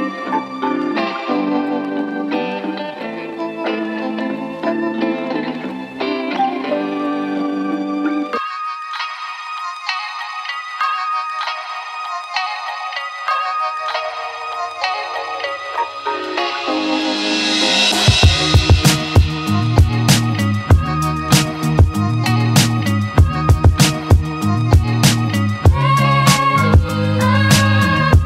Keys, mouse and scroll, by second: 0.5 click, 1.4 Tab, 1.6-1.9 alt+right drag, 1.9-2.6 drag, 2.6 right click, 2.9-3.5 alt+drag, 3.5 Tab, 5.7 alt+click, 5.9 right click, 6.1 click, 6.6 right click, 8.1 click, 8.3 middle click, 8.6 right click, 9.2 click, 9.5 middle click, 9.8 click, 10.8 click, 11.0 right click, 11.2 alt+click, 11.4 alt+middle click, 11.8 click, 12.7 click, 12.9 alt+click, 13.7 alt+middle click, 14.1 alt+click, 15.5-16.7 right drag, 18.4-19.7 right drag, 19.9 click, 19.9 alt+Left, 20.3 middle click, 21.4 click, 22.8 click, 23.1 right click, 23.3 click, 24.3 alt+click, 25.2 right click, 25.5 middle click, 25.7 right click, 26.5-27.2 right drag, 27.6 right drag, 27.7-28.2 drag.